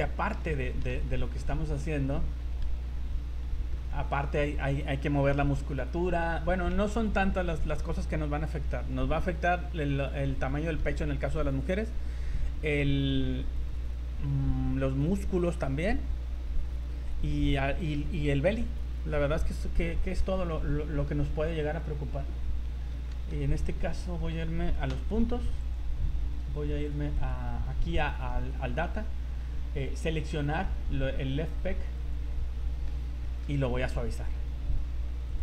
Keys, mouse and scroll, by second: 0.7 shift+middle click, 1.0 z, 1.2 middle click, 1.6-2.0 scroll up 4, 3.1 scroll down 2, 3.4 middle click, 6.6 scroll down 3, 6.9 z, 7.3 middle click, 10.4 middle click, 12.4 scroll down 3, 13.0 scroll up 3, 20.5 middle click, 21.3 scroll up 1, 23.1 shift+middle click, 24.9 v, 25.6 right click, 27.1 click, 29.5-29.8 scroll down 3, 30.4 scroll up 4, 32.0 click, 32.6 middle click, 33.0 scroll up 2, 33.2 middle click, 33.5 z, 35.3 click.